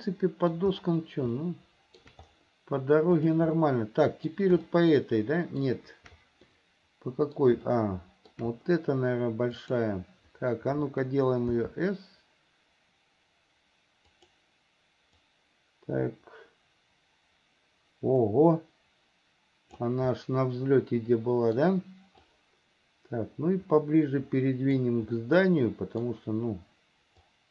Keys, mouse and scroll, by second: 1.6 shift+middle click, 3.4 click, 3.8 middle click, 4.9-5.9 shift+middle drag, 6.7 middle click, 7.9 shift+middle click, 9.8 click, 11.7 s, 15.4-20.1 drag, 20.4-21.8 middle drag, 22.4-25.0 drag, 25.4 middle click, 27.4-27.5 drag.